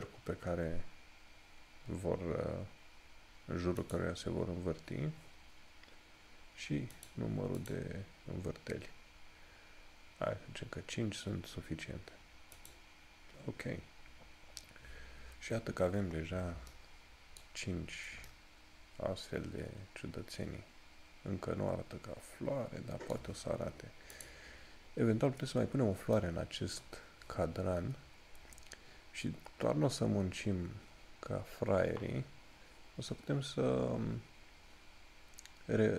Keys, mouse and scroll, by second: 4.0 click, 7.1 click, 12.7 click, 14.1 scroll down 1, 24.3 click, 25.7 scroll up 1.